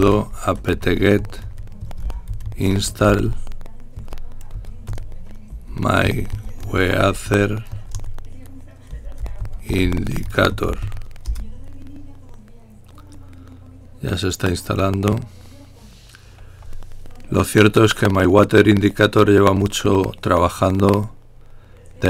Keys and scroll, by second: 0.0-8.0 typing, 10.0 typing.